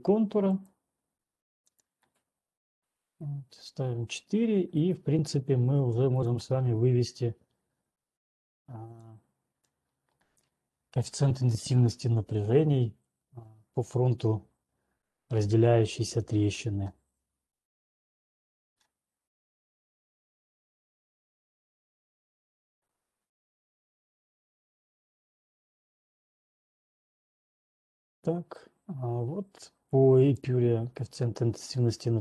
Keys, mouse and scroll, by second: 0.0 right click, 0.9 click, 2.3 click, 2.8 4, 3.3 Return, 5.3 click, 6.8 click, 6.8 right click, 9.8 click, 19.8-20.8 scroll, 20.8-21.6 scroll, 24.3 scroll, 24.8 scroll, 28.6-29.9 scroll down 1, 30.4 click.